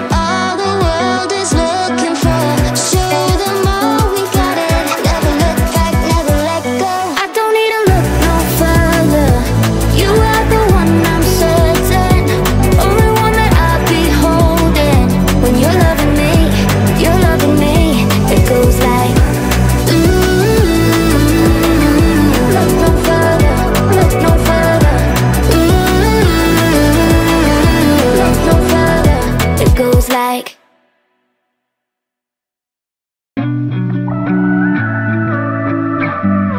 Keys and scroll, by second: 17.5 Delete.